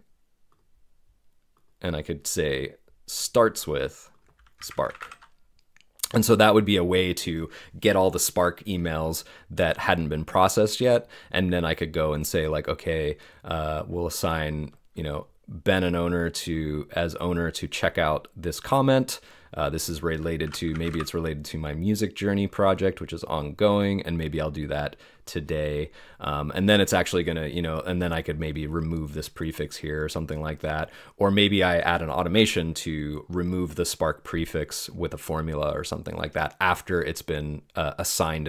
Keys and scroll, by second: 4.3-5.5 typing.